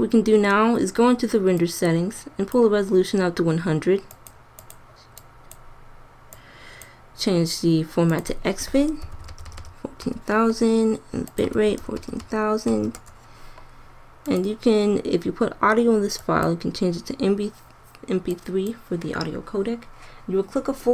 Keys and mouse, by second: 9.4 KP_0, 9.6 KP_0, 12.2 KP_0, 18.3-20.9 drag.